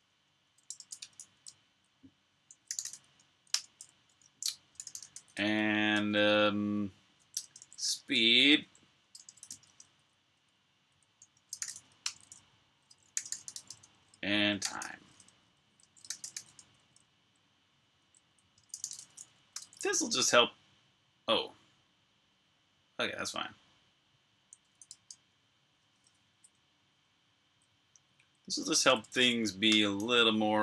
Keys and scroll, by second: 0.4-1.6 typing, 4.4-5.7 typing, 7.2-17.2 typing, 21.4 typing, 24.5-26.1 typing, 26.1 Up, 26.8-27.4 Left, 28.1 Left.